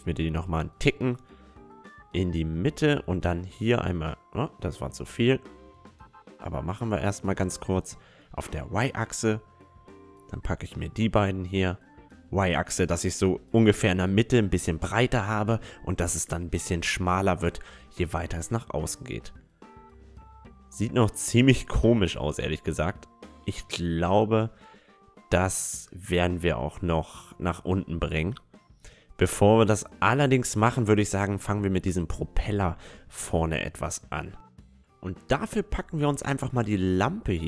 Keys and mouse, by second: 0.7 s, 2.3 s, 7.7-13.4 middle drag, 8.0 a, 9.1-11.6 right drag, 10.8 s, 13.5 Tab, 13.7-15.8 middle drag, 19.0-21.7 middle drag, 22.2-26.0 middle drag, 22.5 Tab, 22.9 Tab, 31.8-33.6 middle drag, 33.8-35.1 middle drag, 35.1 right click, 35.2-36.5 drag, 35.7 a, 36.5 right click, 37.1 middle click, 37.1-37.4 right drag.